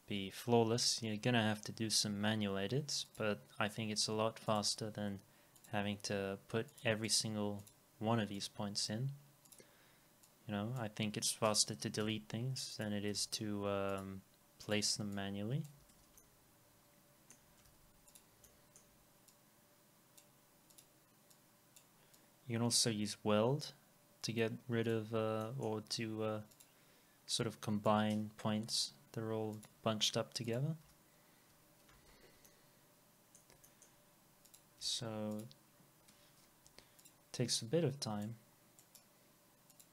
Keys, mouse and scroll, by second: 7.1 right click, 12.0 Delete, 15.2 double click, 15.8 alt+x, 16.2 alt+middle click, 17.7 alt+x, 17.7 middle click, 25.4 middle click, 28.6 Delete, 30.8 Delete, 31.7 scroll down 1, 32.5 alt+middle click, 33.7 alt+middle click, 36.6 Delete, 38.8 right click.